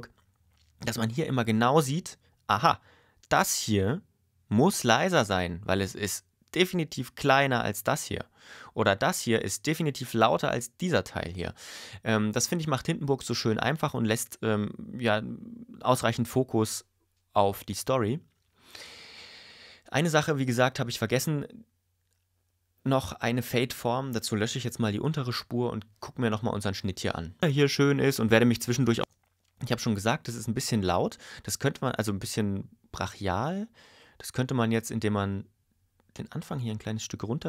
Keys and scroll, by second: 27.4 space, 29.0 space.